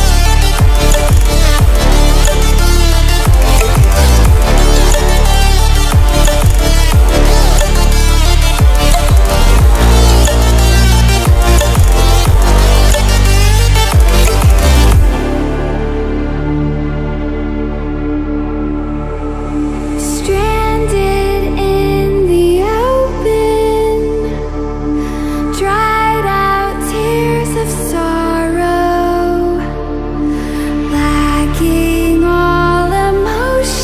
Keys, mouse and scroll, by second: 6.4-6.8 ctrl+alt+scroll down 2, 6.8-7.2 ctrl+alt+scroll up 2, 9.5-16.8 drag, 19.7-23.4 drag, 24.9 alt+click, 30.7 click.